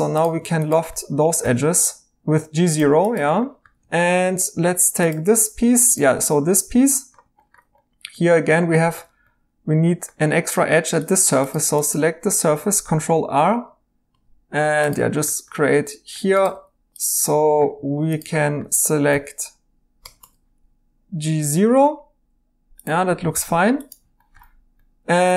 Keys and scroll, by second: 1.4 1, 2.2 Tab, 11.1 Tab, 12.8 ctrl+r, 13.5 Tab, 14.1 Tab, 16.5 2, 19.1 i, 20.0 Tab, 23.3 e.